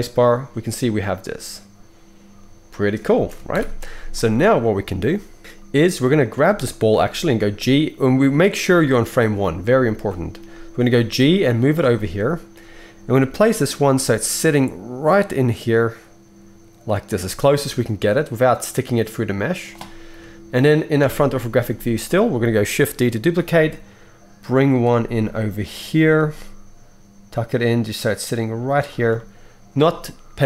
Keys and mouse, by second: 3.2 space, 6.3-20.3 middle drag, 7.4 g, 10.7 g, 13.1 g, 20.1 KP_3, 21.0 KP_1, 21.2-30.4 middle drag, 23.3 shift+d, 26.1 g.